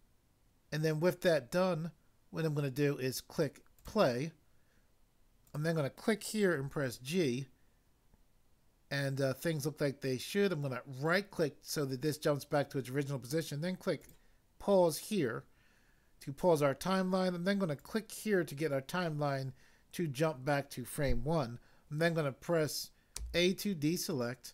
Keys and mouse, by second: 3.7 click, 5.4 click, 6.6 g, 11.1 right click, 14.0 click, 17.7 click, 23.1 a.